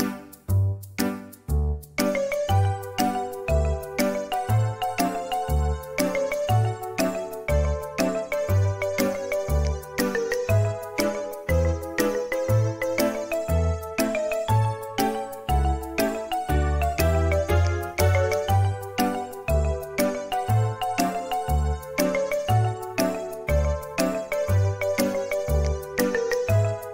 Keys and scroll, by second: 6.1 Return, 22.3 q.